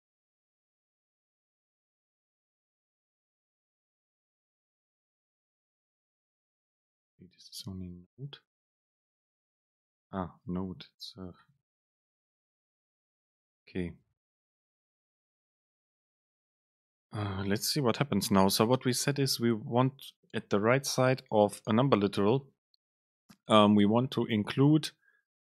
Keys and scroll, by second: 5.0 alt+super+t, 6.2 ctrl+shift+super+t, 12.1 super+space, 12.7 Up, 13.1 Right, 13.7 Down.